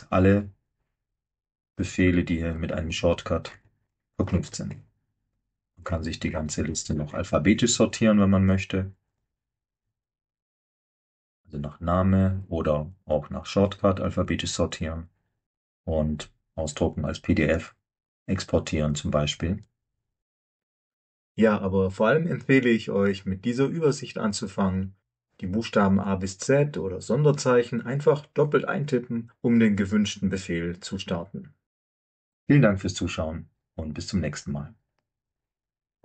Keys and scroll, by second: 21.5 alt+Tab.